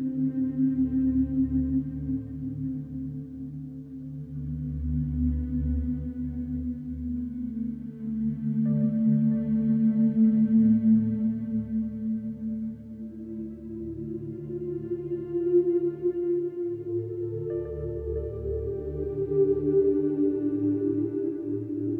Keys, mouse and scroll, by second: 2.5 e, 7.6 e, 11.8 scroll down 2, 12.0-13.0 middle drag, 13.0 alt+click, 13.6 g, 15.7 ctrl+b, 17.7 click, 18.7 alt+click, 19.4 alt+shift+click, 19.9 ctrl+b.